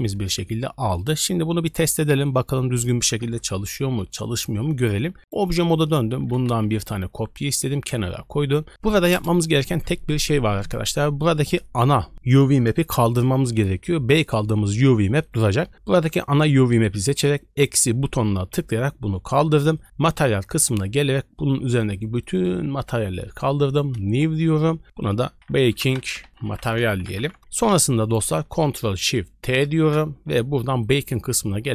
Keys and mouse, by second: 5.1 Tab, 5.2 click, 5.8 shift+click, 6.1 shift+d, 17.7-19.8 drag, 21.6 click, 21.8 click, 22.1 click, 22.3 click, 23.0 click, 24.0 KP_Decimal, 25.0-27.3 drag, 28.0 click, 28.5 click, 29.7 ctrl+shift+t.